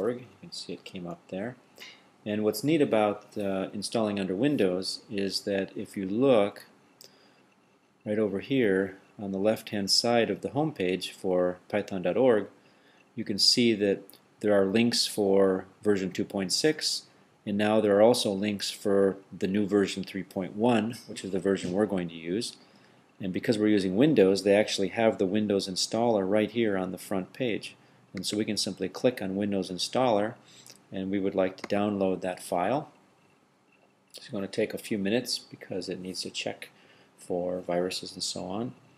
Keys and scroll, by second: 0.0-1.1 typing.